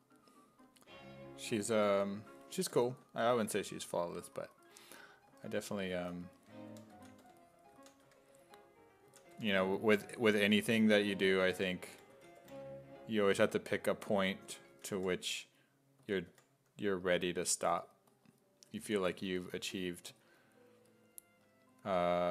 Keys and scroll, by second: 2.4-3.4 typing, 5.3-9.3 typing, 11.2-16.3 typing, 18.9 s, 20.1 s, 22.0 w.